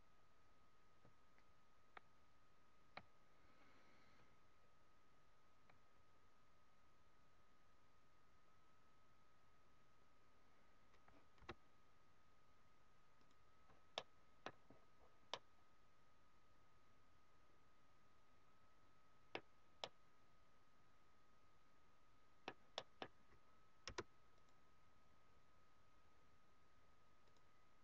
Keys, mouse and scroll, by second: 11.4 space, 13.9 middle click, 14.7-15.0 scroll up 5, 15.3 middle click, 19.4 scroll down 4, 19.6 scroll up 1, 19.7 middle click, 22.7 middle click, 23.8 space, 24.9 scroll down 2.